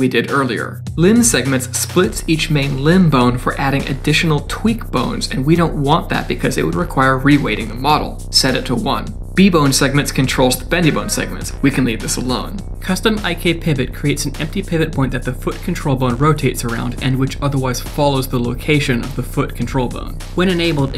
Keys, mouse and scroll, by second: 0.0 click, 0.5 click, 2.4 click, 3.0 click, 4.1 d, 4.1 right click, 4.4 d, 5.0 click, 6.6 click, 9.5 click, 13.1 click, 13.5 scroll down 2, 13.9 middle click, 14.4 click, 14.8 click, 15.6 shift+click, 16.0 shift+middle click, 16.3 middle click, 16.4 Tab, 16.8 middle click, 17.3 click, 17.6 g, 18.2 click, 18.4 g, 19.2 r.